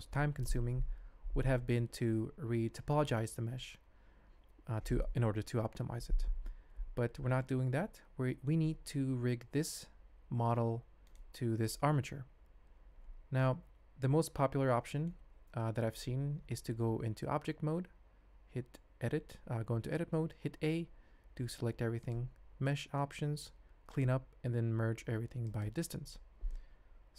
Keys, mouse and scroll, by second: 7.4-8.5 ctrl+middle drag, 10.3 g, 12.5 alt+a, 14.0-15.0 ctrl+drag, 15.0 middle click, 15.9 click, 19.1 Tab, 20.7 a, 22.1-25.7 drag.